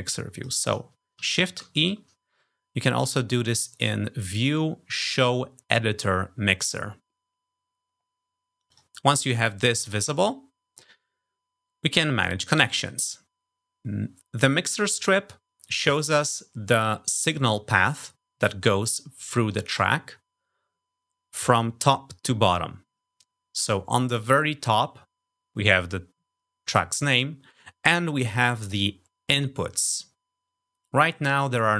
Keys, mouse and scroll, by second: 0.2 click, 1.7 shift+e, 3.6 click, 8.6 click.